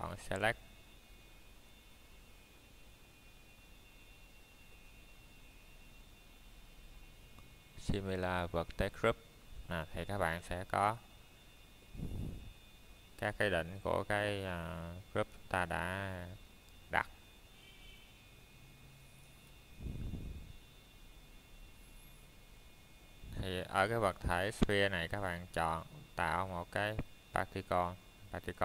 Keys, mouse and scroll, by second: 0.7 middle click, 1.1 shift+middle click, 1.9 Tab, 3.0 click, 3.5 middle click, 4.3 ctrl+Tab, 6.0 click, 6.7 middle click, 10.4 click, 13.6 click, 14.3 middle click, 14.7 scroll up 1, 16.4 click, 25.2 click, 26.3 middle click, 26.8-27.6 scroll down 1, 27.6 middle click, 28.0 scroll up 1.